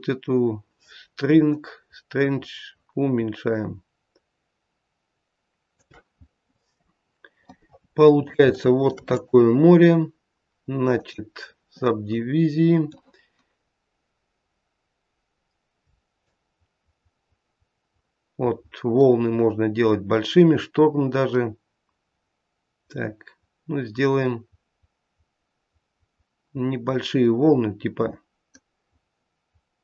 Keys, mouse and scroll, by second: 1.4 shift+click, 6.1-7.5 scroll up 3, 7.5 middle click, 8.6 shift+middle click, 9.1 right click, 11.9-12.7 scroll down 2, 12.1 middle click, 16.3 shift+click.